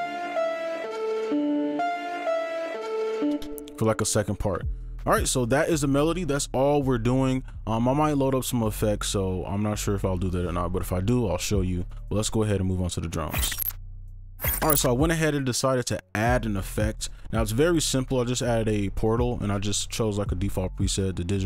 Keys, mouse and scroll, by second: 0.1-1.6 scroll up 1, 1.6-2.5 scroll down 1.